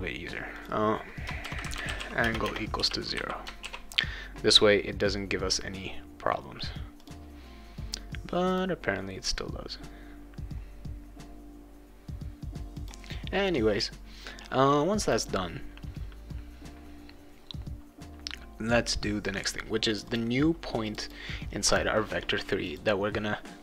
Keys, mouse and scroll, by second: 0.5 click, 1.2-3.2 typing, 3.6 ctrl+s, 7.0 click, 8.5 click, 12.7 click, 15.0 click, 19.9 click, 20.1 click, 20.9 click, 21.0 click, 22.7 click.